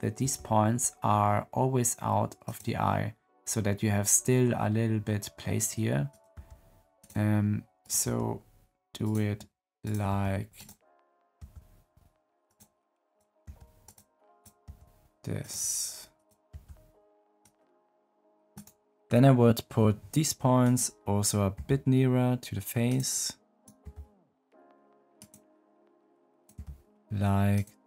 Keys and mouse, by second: 0.1 g, 6.0 click, 6.3 g, 8.0 g, 9.8 click, 10.0 g, 11.1 click, 11.4 g, 13.0 click, 13.4 g, 14.6 g, 16.0 click, 16.4 g, 21.5 g, 23.5 click, 23.8 g, 26.5 g.